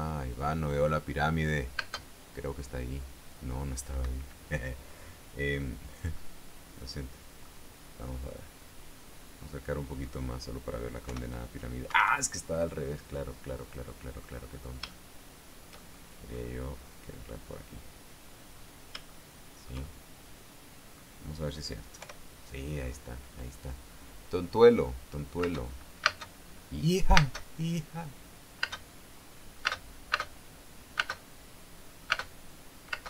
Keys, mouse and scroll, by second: 2.3 space, 4.5 Escape, 6.7-8.1 middle drag, 8.9-9.6 scroll up 4, 9.7 scroll up 2, 10.1 middle click, 10.5 scroll up 2, 11.6 p, 12.4 Escape, 13.7-14.9 middle drag, 14.9-15.4 scroll down 3, 15.4-17.0 shift+middle drag, 17.1 scroll up 2, 18.9-19.4 scroll down 2, 19.6-21.6 shift+middle drag, 22.5 p, 26.0 space, 26.6 space, 27.7 space, 29.2 space, 30.2 space, 31.5 space, 32.6 space.